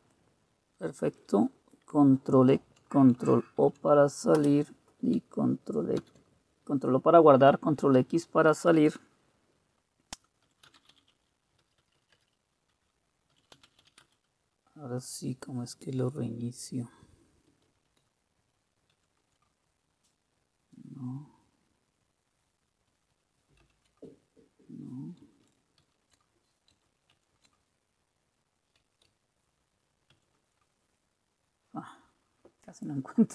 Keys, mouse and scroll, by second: 3.6 ctrl+o, 4.4 Return, 6.0 ctrl+x, 10.2-12.0 typing, 13.1-14.3 typing, 18.9 super+q, 23.6 super+w, 25.8 ctrl+super+w, 27.1 ctrl+super+q, 30.1 alt+super+q.